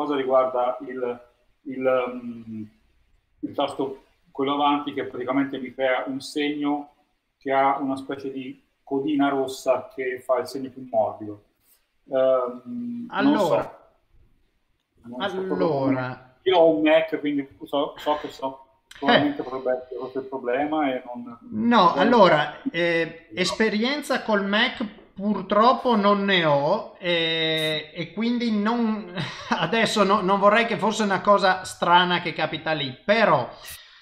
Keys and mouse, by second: 3.7 click, 3.7 right click, 5.6 typing, 15.9 Tab, 15.9 click, 17.5 Tab, 18.1 middle click, 19.2 shift+middle click, 20.6 Tab, 21.3 click, 23.1 middle click, 24.7 KP_0, 29.4 middle click, 30.1 middle click, 31.7 shift+middle click, 32.6 ctrl+middle click.